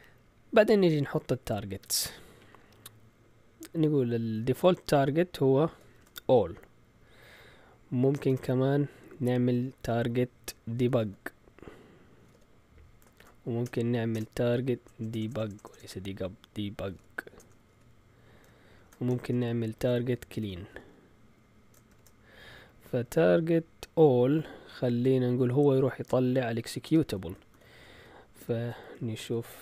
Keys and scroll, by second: 4.2-5.9 typing, 8.1 Return, 8.3 Return, 10.6-13.2 typing, 13.6 Return, 14.1 Return, 14.8-18.7 typing, 19.1 Return, 19.2 Return, 19.9-23.4 typing, 26.9-29.6 typing.